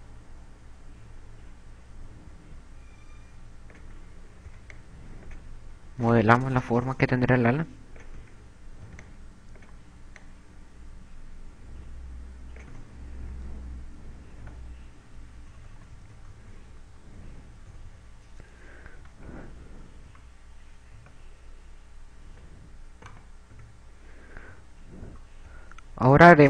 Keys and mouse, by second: 1.0 click, 4.8 a, 5.4 b, 7.2 click, 9.3 a, 9.6 b, 13.6 a, 14.2 Tab, 15.0 z, 16.4-18.2 typing, 19.8 z, 21.2 a, 22.0 z, 23.2 Tab, 23.2 right click, 25.2 KP_2, 26.0 KP_2.